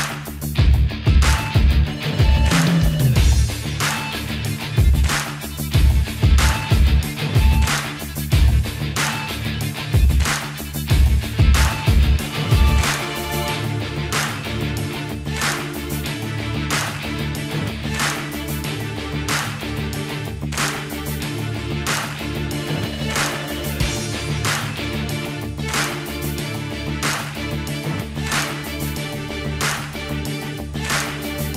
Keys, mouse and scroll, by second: 12.4 click, 15.6 ctrl+Num_Lock, 15.6 a, 16.4 click, 17.8 click, 22.5 click, 30.5 click, 30.7-31.2 typing.